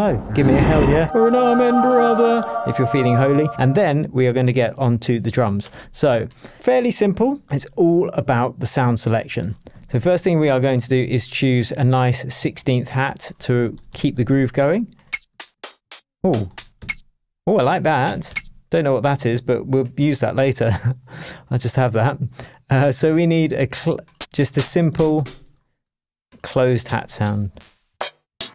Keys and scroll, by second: 9.7 Down, 11.2 Right, 13.6 Up, 15.3 Down, 16.2 Up, 18.0 Down, 18.3 Up, 24.5 Up, 26.7 Up, 27.2 Down.